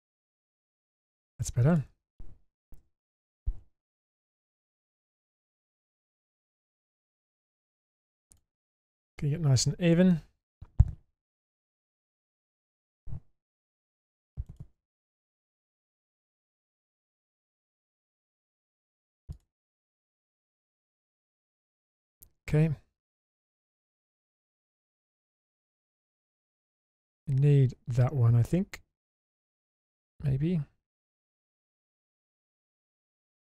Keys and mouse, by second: 0.3 click, 0.9 middle click, 1.7 click, 2.8 1, 3.1 click, 4.1 g, 5.7 click, 6.0 g, 7.5 g, 8.7 middle click, 10.1 middle click, 11.3 middle click, 13.7 2, 14.5 click, 15.5 ctrl+click, 16.5 typing, 16.7 shift+click, 19.3 shift+click, 21.4 middle click, 23.2-24.4 middle drag, 25.8-31.3 middle drag, 31.5 shift+middle click, 32.1-33.4 middle drag.